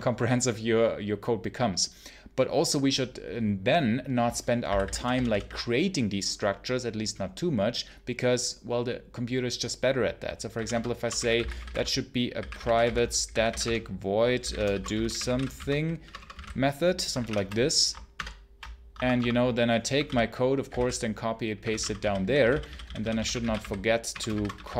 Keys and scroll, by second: 4.5 v, 4.8 j, 10.4-17.6 typing, 10.6 Return, 18.0 ctrl+shift+Return, 18.8 Escape, 19.0 Escape, 19.6-24.7 typing.